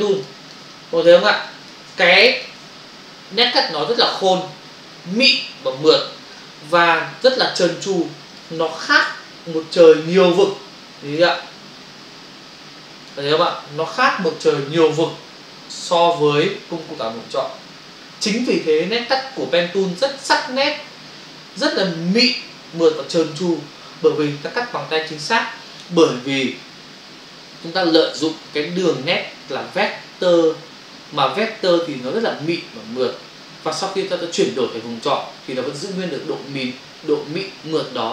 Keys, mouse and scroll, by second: 0.2 ctrl+click, 0.4 ctrl+click, 0.6 ctrl+click, 0.7 click, 1.3 ctrl+space, 1.4 ctrl+click, 1.6 ctrl+space, 2.6 space, 8.4 ctrl+click, 8.6 click, 11.4 ctrl+click, 14.3 ctrl+click, 19.1 ctrl+click, 19.2 ctrl+click.